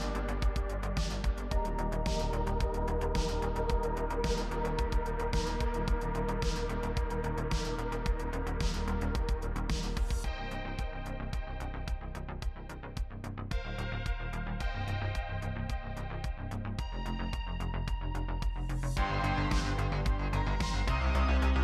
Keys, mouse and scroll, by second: 0.1 scroll down 1, 0.2 middle click, 0.2 Tab, 0.4 shift+middle click, 0.4 middle click, 0.5 ctrl+r, 0.7 middle click, 0.8 Tab, 0.8 middle click, 0.9 scroll down 2, 1.0 middle click, 1.0 Tab, 1.0 middle click, 1.2 Tab, 1.3 scroll up 1, 1.5 z, 1.6 g, 1.9 alt+shift+Left, 2.3 alt+shift+click, 2.3 g, 2.5 middle click, 2.5 Tab, 2.6 middle click, 2.6 z, 2.8 shift+middle click, 2.9 scroll down 2, 3.0 middle click, 3.0 middle click, 3.2 click, 3.3 alt+a, 3.3 middle click, 3.4 scroll up 1, 3.4 middle click, 3.5 click, 3.5 middle click, 3.6 click, 3.7 KP_3, 3.7 Tab, 3.8 middle click, 3.9 Tab, 4.0-4.8 scroll up 4, 4.0 middle click, 4.2 middle click, 4.3 alt+click, 4.4 z, 4.4 shift+middle click, 4.8 ctrl+r, 4.9 a, 4.9 middle click, 5.0 alt+click, 5.0-5.7 scroll down 4, 5.7 middle click, 5.8 scroll up 4, 5.9 KP_3, 5.9 Tab, 6.0 z, 6.0 shift+middle click, 6.6 z, 7.0 scroll down 1, 7.1-7.5 scroll up 1, 7.5 scroll down 1, 7.6 shift+middle click, 7.7 Tab, 7.8-10.3 typing, 7.8 middle click, 7.9 scroll up 1, 8.0 click, 8.0 middle click, 8.2 middle click, 8.4 click, 8.5 middle click, 8.6 click, 8.8 middle click, 8.9 scroll down 1, 9.0 alt+a, 9.0 middle click, 9.3 Tab, 9.4 middle click, 9.5 shift+middle click, 9.5 scroll up 4, 9.7 shift+middle click, 9.8 middle click, 9.9 scroll down 1, 10.0 middle click, 10.4-13.2 scroll up 3, 12.5 shift+middle click, 12.8 ctrl+r, 12.9 shift+middle click, 13.2-17.0 typing, 13.2 middle click, 13.4 middle click, 13.5 middle click, 13.5 ctrl+r, 13.9 scroll down 4, 13.9 middle click, 14.0 Tab, 14.0 middle click, 14.1 middle click, 14.2 shift+middle click, 14.3 scroll up 2, 14.3 scroll down 1, 14.4 middle click, 14.4 scroll up 1, 14.6 scroll down 1, 14.6 middle click, 14.8 middle click, 15.3 Tab, 15.4 middle click, 15.5 ctrl+z, 15.5 middle click, 15.6-16.2 scroll up 2, 15.7 middle click, 16.2 scroll down 2, 16.2 middle click, 16.4 middle click, 16.4 ctrl+r, 16.6 Tab, 16.7 middle click, 16.7 Tab, 16.9 middle click, 17.2 middle click, 17.3 scroll down 2, 17.4 click, 17.5 middle click, 17.7 click, 17.7 middle click, 17.8 click, 18.2 KP_3, 18.2 z, 18.2 shift+middle click, 18.3 scroll up 4, 18.4 middle click, 18.4 scroll down 1, 18.4 shift+middle click, 18.5-19.2 scroll up 2, 18.8 middle click, 19.2 scroll down 1, 19.7 shift+middle click, 19.8 e, 19.9 shift+middle click, 19.9 e, 20.6 scroll down 3, 20.6 scroll up 1, 20.7 middle click, 20.7 scroll down 1, 20.8 middle click, 20.8 scroll up 1, 20.9 alt+click, 21.4 scroll down 1, 21.5 middle click, 21.5 2.